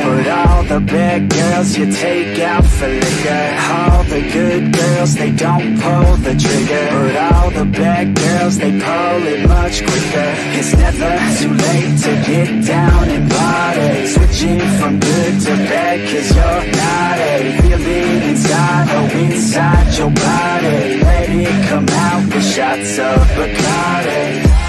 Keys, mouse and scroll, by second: 3.4 r, 6.1 ctrl+r, 7.5-8.8 middle drag, 10.1 middle click, 11.7-15.0 drag, 15.4 middle click, 17.3-20.4 drag, 20.7-22.6 middle drag, 23.1 ctrl+z, 23.4 middle click, 24.3-24.6 drag.